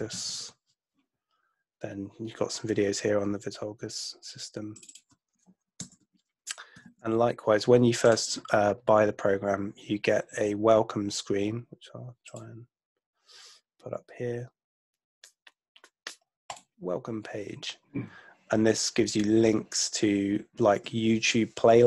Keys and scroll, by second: 0.0-0.8 typing, 5.8 BackSpace, 6.9 super+Tab.